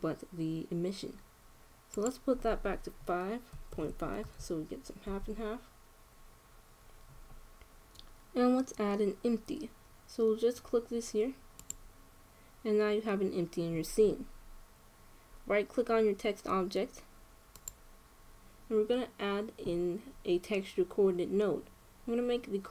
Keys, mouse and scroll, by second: 2.6-4.5 drag, 12.4-14.0 drag, 18.3-20.1 right drag.